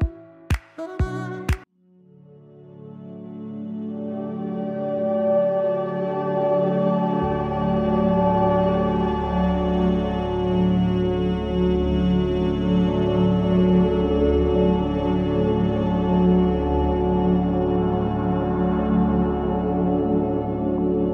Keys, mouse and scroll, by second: 1.8 click, 4.3 scroll down 1, 6.4-7.0 scroll down 2, 9.2 scroll down 1, 9.4 scroll up 1, 9.5 scroll, 9.7 scroll down 1, 10.2 scroll down 1, 14.1-16.0 drag, 16.6 click.